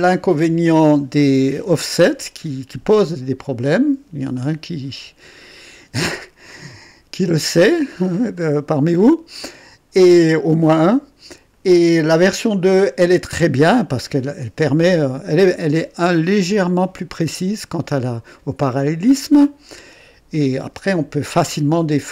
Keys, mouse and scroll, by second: 2.2-11.7 drag, 15.1-16.8 drag, 19.7 click.